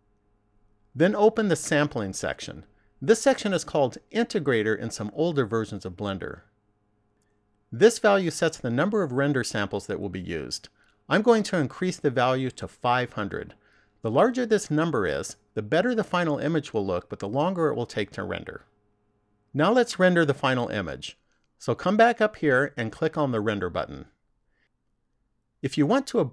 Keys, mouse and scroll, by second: 1.8 click, 4.1 click, 11.7 click, 13.9 0, 21.0 click, 23.8 click.